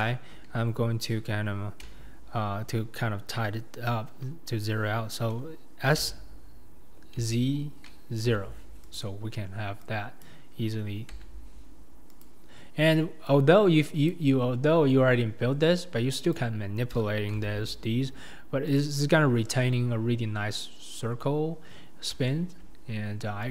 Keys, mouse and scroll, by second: 6.1 s, 10.2 click, 11.2 g, 14.1 click, 16.4 click, 17.4 g, 22.3 shift+middle click.